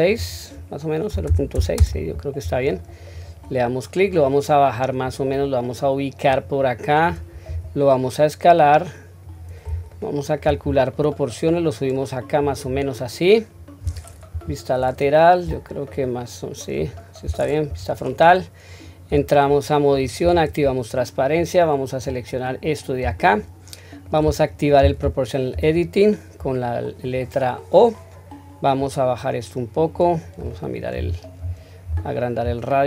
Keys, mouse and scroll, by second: 0.2-1.8 drag, 3.1 click, 4.1-5.0 drag, 5.4-6.3 scroll down 1, 6.3-7.2 drag, 6.3-6.7 scroll down 1, 7.5 s, 9.9-10.4 shift+middle drag, 10.6-11.5 scroll up 1, 11.5-12.4 drag, 11.5-12.4 scroll up 1, 12.7-13.5 scroll down 2, 13.5-14.3 scroll up 2, 14.3 KP_3, 15.5 click, 16.2 click, 17.7 KP_1, 19.1 Tab, 20.2 q, 21.4-23.2 drag, 23.2-24.1 shift+middle drag, 25.5 o, 28.8-32.8 drag.